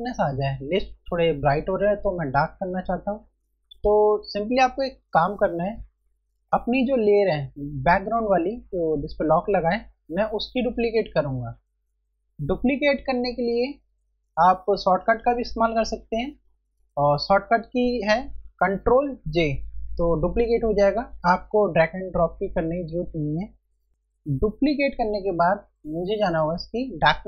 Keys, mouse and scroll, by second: 12.3 click, 18.4 ctrl+Num_Lock.